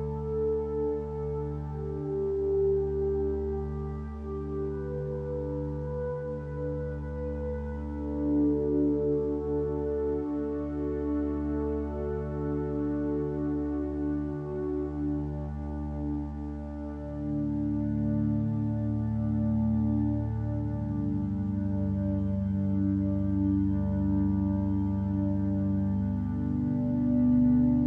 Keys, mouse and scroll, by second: 11.2 ctrl+z, 13.3 ctrl+z, 25.6 ctrl+space.